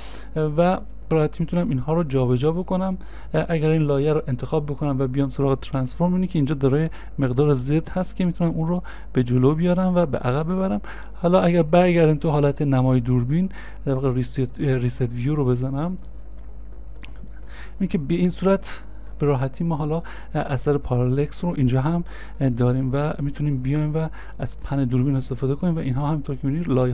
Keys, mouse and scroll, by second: 7.3 scroll up 1, 8.2 scroll up 1, 9.5 scroll down 1.